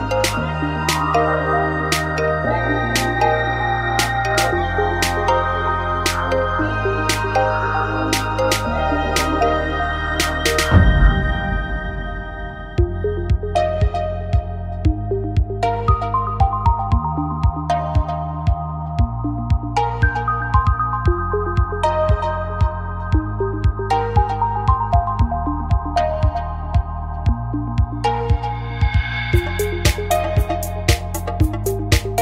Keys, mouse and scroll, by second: 0.6 f, 0.7 a, 1.0-3.7 middle drag, 4.5-9.4 right drag, 6.3 a, 8.2 f, 8.2 a, 9.6 f, 9.7 a, 10.7-13.0 right drag, 12.7 f, 13.1 a, 14.7-17.2 right drag, 16.8 f, 16.9 a, 17.2 middle click, 18.3 middle click, 18.5 middle click, 18.7 middle click, 19.4 middle click, 19.9 KP_7, 21.4-22.4 right drag, 22.4 w, 26.2-27.5 middle drag, 27.5 right click, 28.3 click, 28.3 w, 28.4 right click, 28.5-29.6 middle drag.